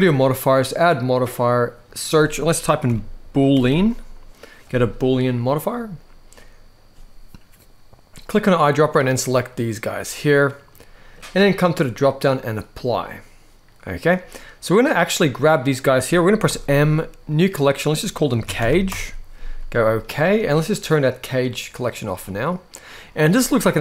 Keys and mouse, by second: 0.1-5.2 drag, 3.3 o, 7.9 click, 10.3-10.8 middle drag, 11.7-12.7 drag, 13.5-14.4 middle drag, 15.0 click, 16.2 m, 21.5 click, 21.9-22.7 middle drag, 23.3-23.8 middle drag.